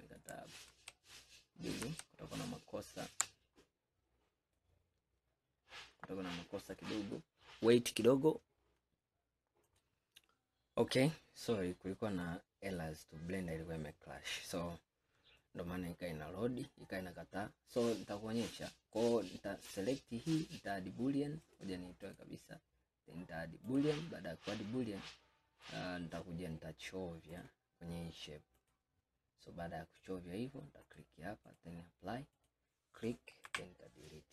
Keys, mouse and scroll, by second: 0.8 ctrl+z, 1.9 ctrl+z, 4.7-7.8 middle drag, 9.8 middle click, 12.3-14.8 middle drag, 14.8 scroll up 2, 15.5-16.8 middle drag, 16.8-17.2 scroll down 1, 17.5-20.5 scroll down 3, 21.5-22.1 drag, 23.8-25.1 drag, 25.8-27.4 middle drag, 27.4 click, 30.9-32.5 drag, 33.5 Delete, 34.2-34.3 middle drag.